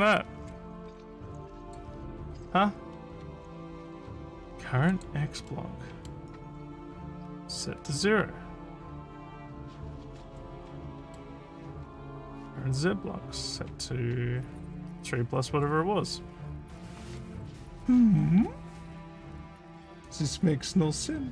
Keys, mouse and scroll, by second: 1.6 click, 4.9 click, 5.5 middle click, 10.4 middle click.